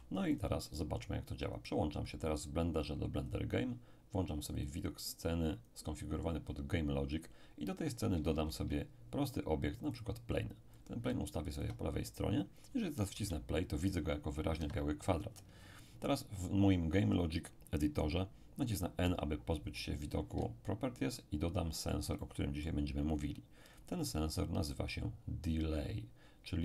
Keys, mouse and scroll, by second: 0.4 click, 1.5 click, 3.2 click, 4.6-6.6 drag, 8.3 shift+a, 9.9-12.6 drag, 13.1 p, 14.6 Escape, 19.0 n, 21.1-23.6 ctrl+middle drag, 23.7 click.